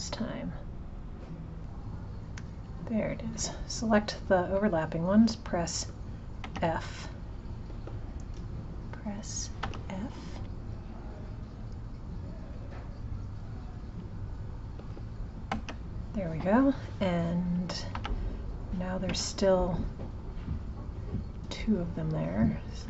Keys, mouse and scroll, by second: 0.2 click, 2.7 click, 10.5 click, 11.1 click, 12.6 click, 14.0 click, 15.6 f, 17.6 click, 20.0 click, 21.4 click, 22.0 click.